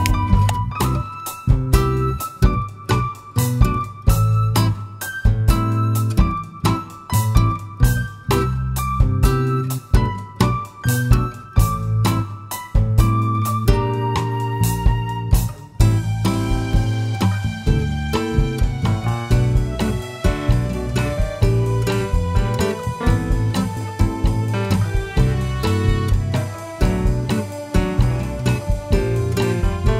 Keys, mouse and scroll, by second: 0.0 shift+middle click, 0.1 click, 0.8 s, 3.0 click, 3.2 s, 6.7 click, 6.9-7.2 scroll up 2, 7.2-20.0 shift+middle drag, 8.6 `, 10.6 Tab, 11.8 ctrl+r, 13.9 Escape, 14.5 ctrl+r, 16.4 Escape, 18.2 shift+z, 19.7 1, 20.0 click, 20.3 click, 22.7 x, 23.9 click, 24.9 shift+z, 25.8-29.9 middle drag, 26.7 scroll up 1, 27.3 shift+scroll up 1.